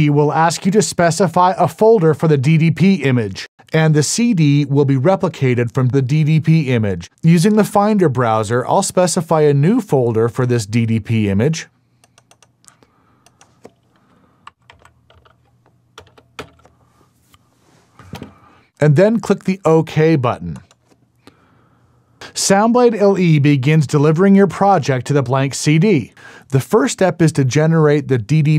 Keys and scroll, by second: 14.3-16.4 typing, 18.1 KP_Enter.